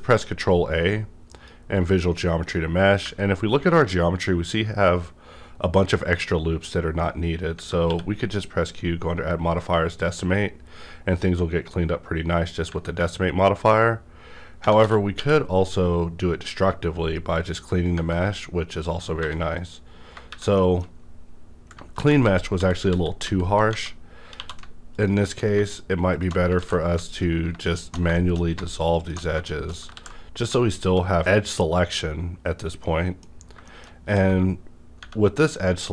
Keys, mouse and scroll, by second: 1.3 click, 1.9 middle click, 2.5-3.0 scroll up 1, 3.0 Tab, 7.8 q, 9.5 click, 11.8 scroll down 1, 12.3 scroll up 1, 13.0 scroll up 1, 15.1 q, 17.3 click, 18.3-19.1 scroll down 1, 19.1 3, 19.2 scroll down 1, 19.5 click, 20.3 shift+`, 20.5 shift+middle click, 21.9 ctrl+z, 23.7 Tab, 24.1 scroll up 1, 24.3 2, 24.9 alt+click, 25.5 2, 25.6 alt+shift+click, 26.1 alt+shift+click, 26.5 x, 27.7 alt+shift+click, 28.1 shift+middle click, 29.4 shift+middle click, 29.9 ctrl+x, 30.7 click, 31.1 scroll down 1, 32.8 middle click, 33.3 scroll up 1, 33.6 middle click, 34.0 scroll up 1.